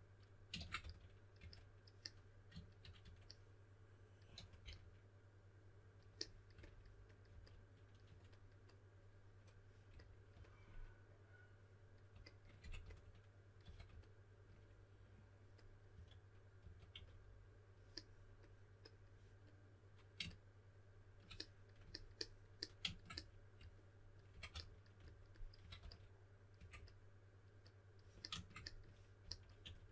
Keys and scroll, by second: 0.8-1.9 typing, 3.0 typing, 4.3 typing, 7.3-8.5 typing, 12.3-13.6 typing, 15.9-16.9 typing, 24.0-26.5 typing, 29.2-29.6 typing.